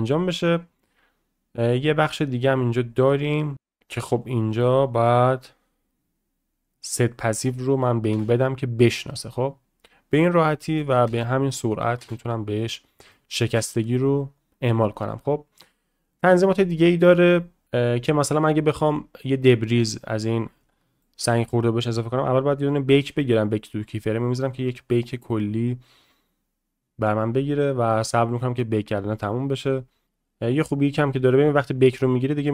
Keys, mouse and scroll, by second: 3.5 space, 4.3 click, 8.1 space, 10.1-10.8 middle drag, 11.5 click, 13.1 shift+middle drag, 20.6-21.0 shift+middle drag, 21.2 middle click, 22.2-32.5 drag.